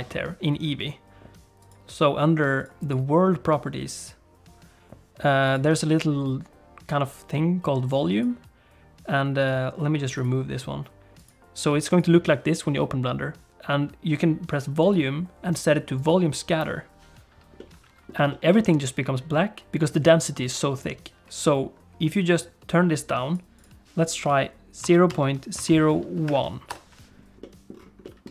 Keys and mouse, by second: 1.6 click, 2.5 click, 2.8 click, 5.5 click, 8.1 click, 9.4 click, 11.2 click, 14.9-16.1 drag, 17.6 middle click, 18.3 shift+middle click, 18.6 middle click, 22.2-23.3 drag, 23.7-27.2 drag, 27.5 middle click, 28.2 middle click.